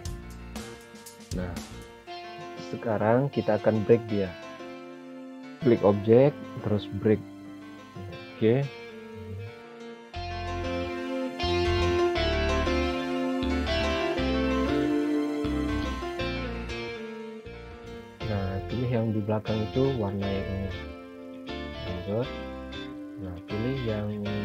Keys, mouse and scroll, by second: 0.9 scroll up 1, 1.7 scroll down 1, 3.5 click, 5.8 click, 8.1 click, 8.8 scroll down 1, 11.3 click, 17.1 click, 21.2 click.